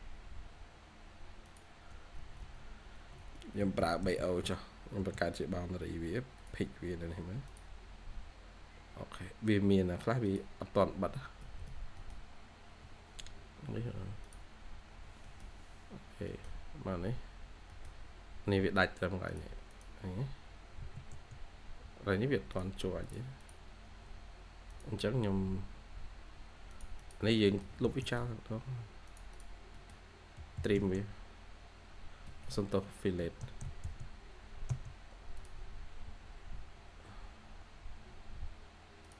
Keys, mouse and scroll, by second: 0.1-1.2 scroll up 1, 2.1 Escape, 2.3 Escape, 2.5 scroll up 1, 3.1 Escape, 3.5-3.9 typing, 6.9-7.2 scroll up 1, 7.0-7.7 typing, 10.5 scroll down 1, 10.7 scroll up 1, 10.8 scroll down 1, 11.1 scroll, 11.3 Escape, 11.6 Escape, 11.9 middle click, 11.9-12.4 scroll down 1, 12.4 scroll up 1, 14.8 scroll down 1, 15.1 middle click, 15.8 scroll up 1, 16.2 middle click, 16.4 scroll down 1, 16.7-17.3 scroll up 1, 17.6 middle click, 18.4 scroll up 1, 19.6 double click, 23.3 double click, 23.7 Escape, 25.7 Escape, 26.9 double click, 27.2 scroll down 1, 27.4 middle click, 27.6 typing, 27.9 middle click, 28.5-29.2 scroll up 1, 29.2 double click, 29.5 scroll up 1, 29.6 middle click, 30.3-31.7 typing, 30.9 scroll down 1, 32.2 Escape, 32.4 Escape, 33.1 typing, 38.1-38.5 scroll up 1, 38.2-39.0 typing.